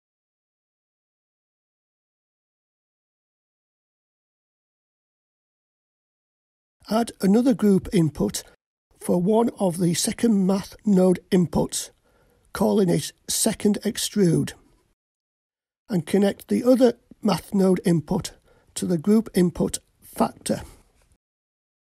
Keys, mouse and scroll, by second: 0.1-6.3 drag, 8.9-13.9 drag, 18.7-19.9 scroll down 2, 19.9 click, 19.9-21.0 scroll down 1, 21.0-21.8 drag.